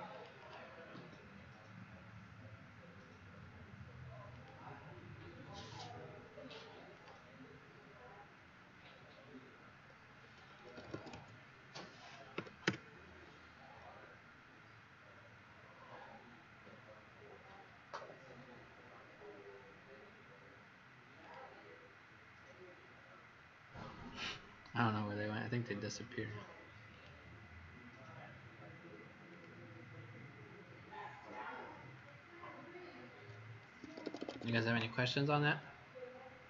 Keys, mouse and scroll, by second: 0.4 click, 0.9 Escape, 4.2 click, 10.5-12.3 typing, 12.6 Return, 16.7 scroll up 3, 17.9-18.6 scroll down 4, 21.1 click, 22.9 scroll up 3, 24.0-24.4 scroll down 3, 26.8 click, 33.8 Escape, 33.9 Escape, 34.1 Escape, 34.3 Escape, 34.4 Escape.